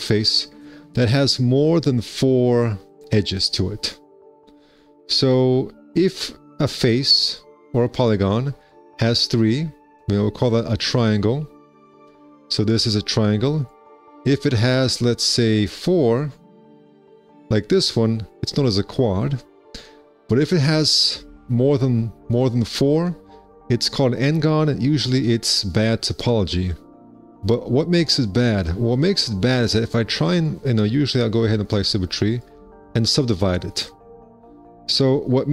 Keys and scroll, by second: 4.4 2, 4.9 1, 6.1 alt+c, 8.0 4, 11.2 z, 13.5 1, 14.8 alt+c, 17.4 4, 18.1 z, 23.5 1, 26.9 2, 28.6 ctrl+r, 28.9 2.